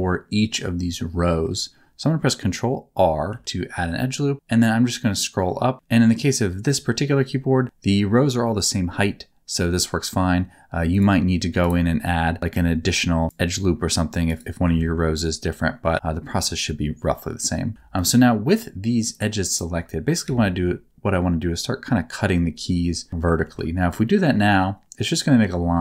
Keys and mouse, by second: 3.3 ctrl+r, 11.6 right click, 12.5 ctrl+r, 14.3 right click, 14.8 ctrl+z, 15.9 alt+a, 17.7 2, 17.9 click, 19.5 shift+click, 20.2 alt+a, 23.4 ctrl+r.